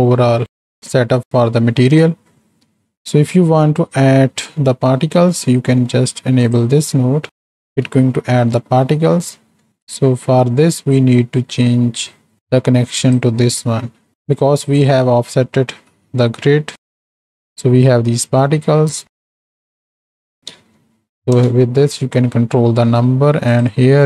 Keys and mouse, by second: 0.5 click, 2.7 click, 4.9 click, 5.8 click, 7.7 z, 9.2 middle click, 9.7 z, 12.2 click, 14.8 middle click, 17.0-18.2 drag, 18.2 middle click, 19.5-21.7 drag, 20.7 KP_0, 23.6-24.0 drag.